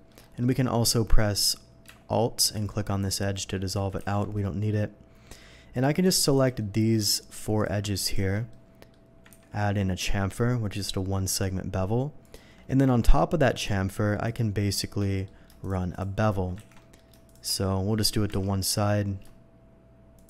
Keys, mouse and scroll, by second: 0.0 shift+middle click, 0.2 shift+middle click, 2.4 alt+click, 3.0 alt+middle click, 4.0 ctrl+x, 4.3 middle click, 5.7 click, 6.3 shift+click, 6.6 shift+middle click, 7.6 shift+click, 8.0 shift+click, 8.5 shift+middle click, 9.3 ctrl+b, 9.7-10.1 scroll down 2, 10.6 scroll down 1, 12.2 shift+click, 12.6 shift+middle click, 13.5 shift+click, 14.2 shift+click, 15.0 shift+middle click, 15.6 shift+click, 15.9 shift+click, 16.8 ctrl+z, 16.8 ctrl+middle click, 17.2 shift+click, 17.6-18.0 shift+middle drag, 18.4 ctrl+b, 18.8 scroll up 2, 20.1 shift+click.